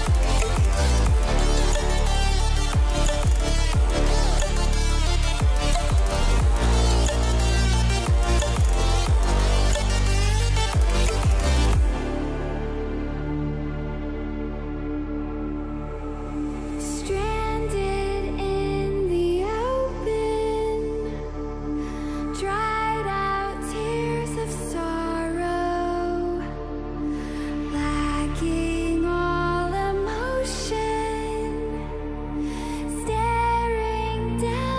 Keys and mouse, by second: 1.8 KP_0, 10.0 shift+middle click, 11.3 r, 11.5 z, 12.2 click, 13.1 click, 15.5 click, 17.2 click, 18.4 click, 22.2 click, 25.2 click, 26.1 s, 28.3 click.